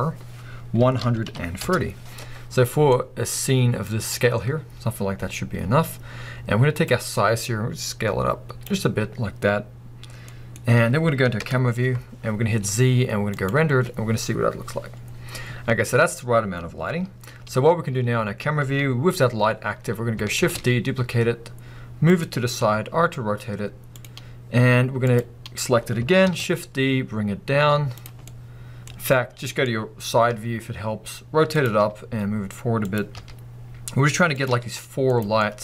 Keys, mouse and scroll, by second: 1.7 Return, 2.9-6.8 middle drag, 6.8-10.3 drag, 10.3 middle click, 11.4 KP_0, 12.3-12.6 scroll up 2, 12.4-13.3 middle drag, 12.6 z, 15.1 scroll down 1, 17.7 scroll up 1, 17.9-22.3 middle drag, 20.4 shift+d, 22.3 click, 22.6 r, 24.1 click, 24.2 scroll down 1, 25.1 click, 26.3 shift+d, 28.2 scroll down 2, 28.3-31.6 middle drag, 28.9 scroll down 2, 30.3 r, 31.6 click, 31.8 g, 33.0 click, 33.2 r, 34.5 g, 35.1 click, 35.4-35.6 middle drag.